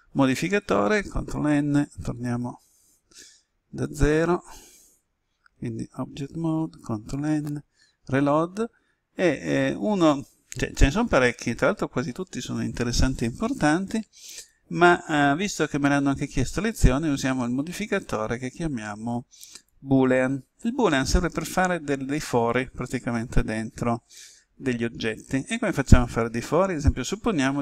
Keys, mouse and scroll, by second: 1.3 ctrl+n, 2.3 ctrl+n, 3.8 click, 5.4 Tab, 6.4 ctrl+n, 7.2 Return, 14.3 click.